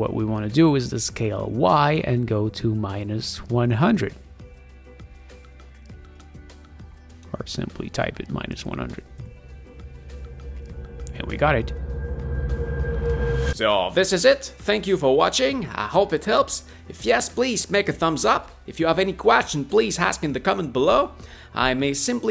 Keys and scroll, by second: 7.7-9.1 typing, 9.2 Return.